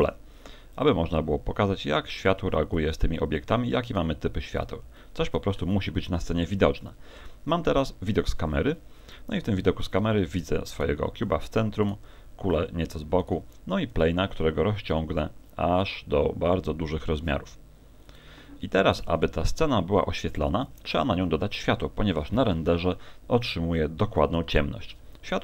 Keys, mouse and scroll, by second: 2.2 click, 3.4 click, 5.0 middle click, 6.1 KP_0, 6.2 KP_0, 8.8-9.9 scroll up 1, 10.8 right click, 11.8 right click, 13.2 right click, 14.0 s, 18.2 click, 24.2 Escape.